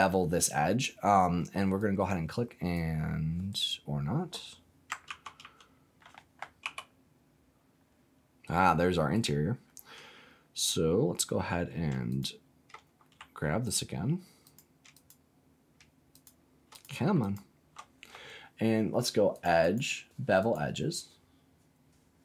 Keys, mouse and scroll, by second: 1.7 click, 3.4 right click, 5.0 ctrl+z, 5.4 ctrl+z, 6.6 g, 9.1 right click, 12.0 shift+click, 13.6 alt+click, 14.4 click, 14.9 alt+shift+click, 16.1 alt+shift+click, 16.7 click, 17.1 alt+click, 19.3 click, 19.6-20.7 drag.